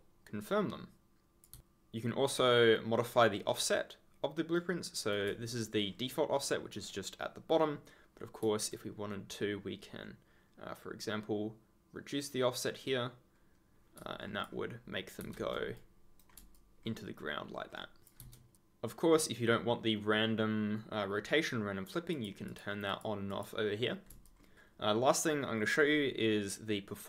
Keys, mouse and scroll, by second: 1.5 ctrl+z, 4.5 right click, 5.4 ctrl+click, 5.8-6.5 ctrl+scroll, 10.4 scroll down 1, 11.7-12.3 scroll down 1, 14.1 ctrl+scroll down 1, 14.3 ctrl+scroll, 15.1 ctrl+z, 15.7 right click, 16.5 ctrl+click, 16.7 ctrl+scroll up 1, 17.5 ctrl+scroll down 1, 18.1 ctrl+z, 18.5 ctrl+click, 22.1 click, 24.2 ctrl+click, 24.3 ctrl+scroll down 1.